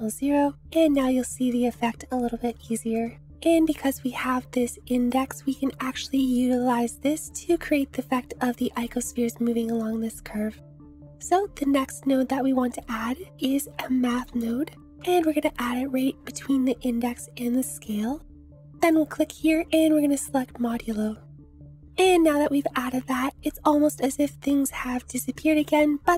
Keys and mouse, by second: 0.9 shift+click, 1.5-2.5 drag, 2.6 shift+click, 3.3 Tab, 5.2-7.0 drag, 10.8 click, 13.2 shift+a, 21.8 ctrl+z.